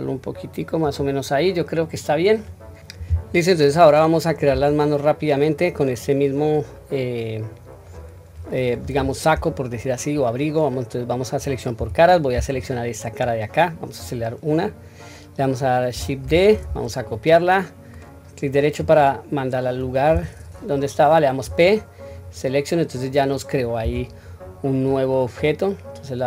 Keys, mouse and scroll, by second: 1.4 middle click, 2.5 scroll down 1, 3.7-4.7 middle drag, 6.0-7.9 middle drag, 12.4 click, 13.2 middle click, 16.6 shift+d, 19.0-19.7 middle drag, 21.4 p, 23.8 Tab, 24.4-25.4 scroll down 2, 24.9-25.4 middle drag.